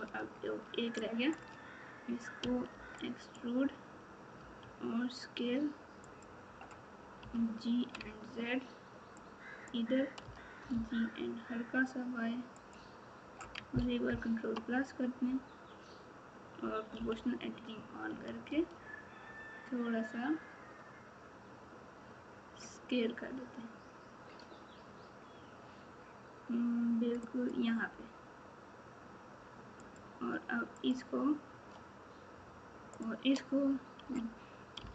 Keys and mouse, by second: 0.9 shift+click, 1.2 shift+click, 14.0 ctrl+KP_Add, 29.9 click.